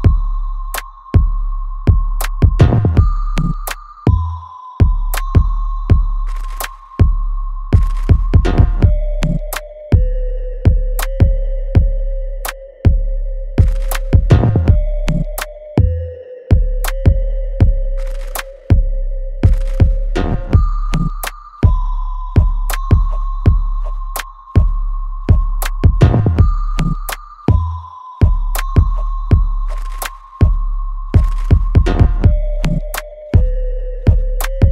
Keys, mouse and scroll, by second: 0.3 alt+right click, 0.8 alt+middle click, 1.3 alt+right click, 1.8-3.6 alt+drag, 3.6 alt+right click, 3.6 alt+right click, 4.0 alt+middle click, 4.4 alt+right click, 5.2 alt+click, 5.6 middle click, 6.7 click, 20.7 click, 22.7 alt+middle click, 23.2-24.9 alt+right drag, 24.9-28.9 ctrl+drag, 28.9 alt+middle click, 30.4 click, 33.9-34.7 ctrl+drag.